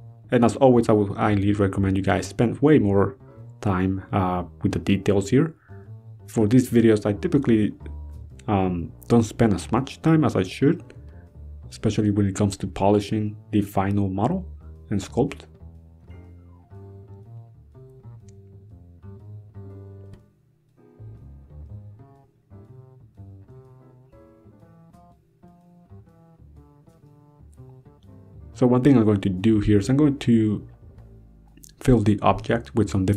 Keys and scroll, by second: 0.7 ctrl+z, 1.8 ctrl+z, 3.0 ctrl+z, 3.8 ctrl+z.